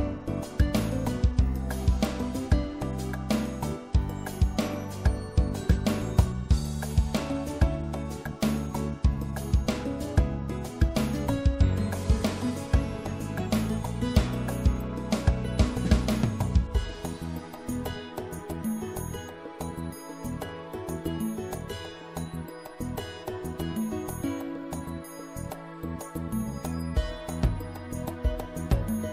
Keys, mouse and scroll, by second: 4.9-6.9 middle drag, 9.1-10.3 middle drag, 11.5 middle click, 12.2-13.3 middle drag, 13.4-14.6 scroll up 1, 14.6-17.5 middle drag, 17.5-20.8 right drag.